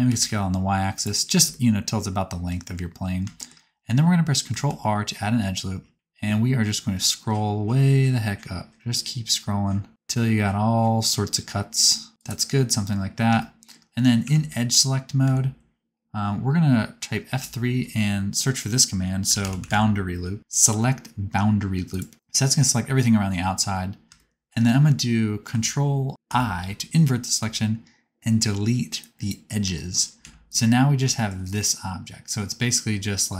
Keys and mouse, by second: 1.0-3.7 middle drag, 4.8 ctrl+r, 10.1 middle click, 14.2 2, 15.2 a, 17.3 F3, 26.2 ctrl+i, 27.3 x, 30.3 1, 30.5 click, 31.0 shift+middle click, 31.6-33.3 middle drag.